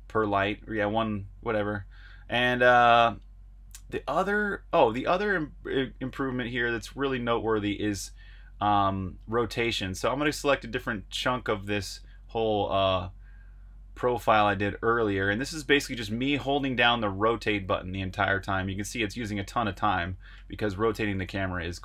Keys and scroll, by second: 17.4 super+Tab, 20.3 super+Tab, 21.5 super+r.